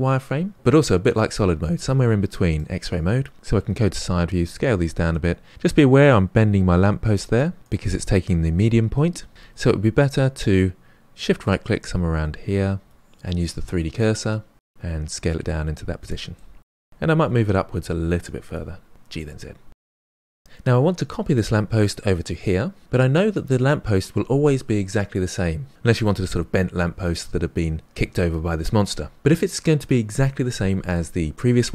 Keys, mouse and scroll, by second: 1.7-3.3 drag, 3.3 KP_1, 3.5 s, 7.6 s, 9.3 ctrl+z, 12.8 shift+right click, 13.8-15.0 drag, 15.0 s, 15.8-16.9 middle drag, 17.7 KP_1, 18.1 g, 19.1 middle click, 19.9 scroll down 3, 20.0 middle click, 20.3 Tab.